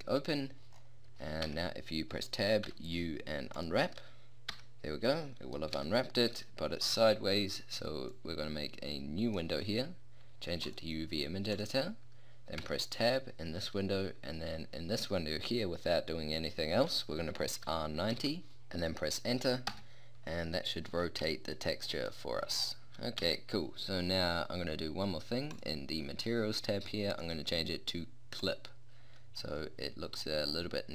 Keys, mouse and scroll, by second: 0.0-0.4 drag, 0.8 middle click, 0.9-1.4 drag, 1.4 Tab, 2.7 u, 4.6 Tab, 5.1 click, 5.4-6.2 middle drag, 6.4-8.0 middle drag, 8.2 middle click, 8.4 click, 9.2 middle click, 10.6-12.6 middle drag, 12.6 Tab, 17.6 r, 20.8-23.2 middle drag, 23.2 Tab, 29.5 middle click, 30.0-30.9 middle drag.